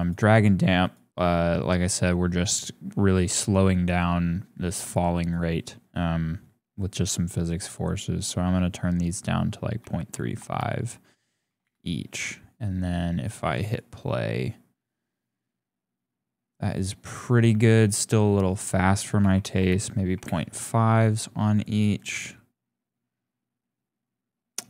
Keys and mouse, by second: 5.2-11.6 drag, 13.2 click, 17.5 click, 18.5-20.2 drag, 21.5 click, 21.9 click.